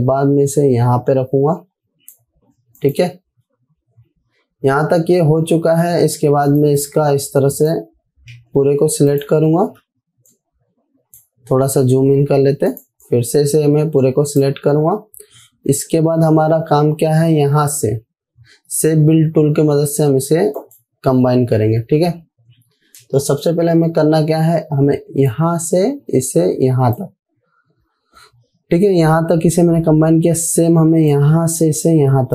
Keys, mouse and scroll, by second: 0.3-2.8 click, 4.0 alt+scroll down 2, 5.6-6.5 scroll down 3, 7.0-8.2 drag, 9.1 ctrl+c, 9.6 click, 10.2 z, 10.7 click, 10.8-11.6 drag, 12.7 v, 13.1-15.1 drag, 21.1 click, 26.0-27.3 drag, 31.6-32.3 drag.